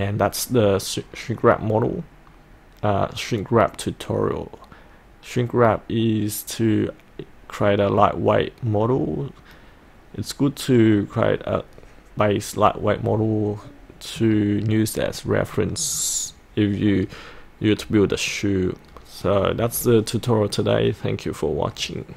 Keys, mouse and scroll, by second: 8.0-9.0 middle drag, 13.4-15.1 middle drag.